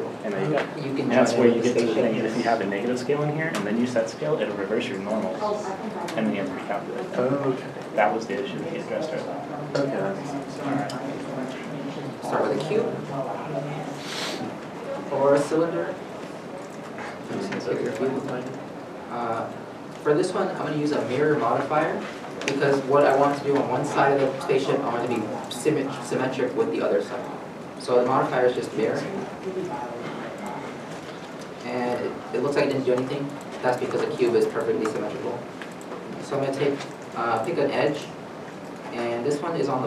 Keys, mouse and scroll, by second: 3.2 shift+m, 3.3 Return, 4.3 middle click, 5.5-5.9 scroll up 1, 6.2 n, 7.4 shift+middle click, 13.4 shift+middle click, 13.6 shift+middle click, 15.2 scroll down 1, 16.7 middle click, 16.9 Tab, 17.9 middle click, 18.5 3, 18.5 middle click, 21.9 Tab, 33.7 Tab, 33.8 middle click, 34.4 Tab, 35.0 middle click.